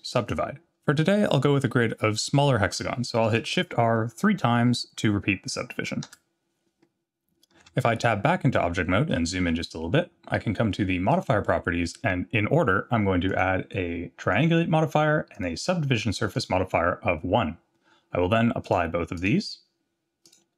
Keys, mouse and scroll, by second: 3.6 shift+r, 4.6 shift+r, 6.1 shift+r, 7.6 Tab, 9.1-9.6 scroll up 4, 11.1 click, 13.3-14.4 drag, 15.3-16.6 drag, 18.6-19.3 drag, 20.2-20.5 drag.